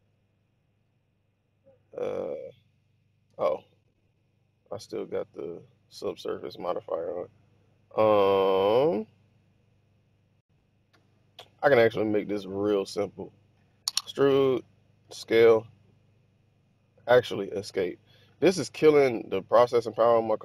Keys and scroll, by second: 3.2 z, 14.9 s, 17.0 Escape.